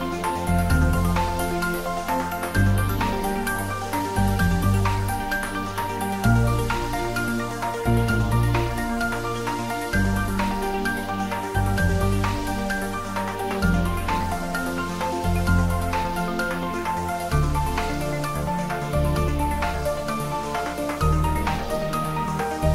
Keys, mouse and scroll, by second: 0.9 click, 1.5 shift+click, 2.4 r, 3.6 click, 3.9 ctrl+s, 4.1 ctrl+middle click, 4.5 shift+middle click, 5.2 click, 5.5 shift+click, 6.3 x, 6.4 click, 7.0 click, 7.6 shift+click, 9.1 shift+d, 9.7 g, 11.3 click, 11.9 middle click, 12.6 click, 12.9 shift+middle click, 13.7 r, 16.4 click, 16.4-17.3 typing, 18.3 click, 19.4 r, 20.8 click, 21.7 g.